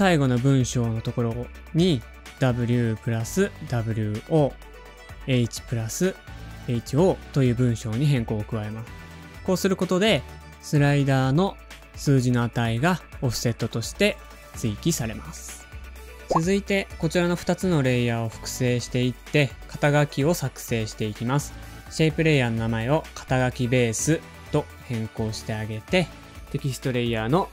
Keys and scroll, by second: 0.0 space, 0.0 ;, 8.5-9.3 typing, 10.3-11.1 typing, 15.9-16.7 typing, 17.5 super+d, 18.2 super+], 18.4 super+[, 20.2 Return, 20.4-23.3 typing, 26.4 shift+Right, 26.4 super+c.